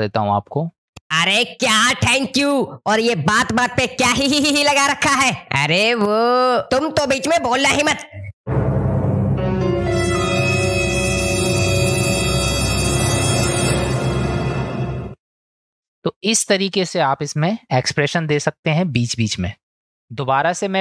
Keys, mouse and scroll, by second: 0.8 ctrl+space, 15.1 ctrl+space, 15.8 space.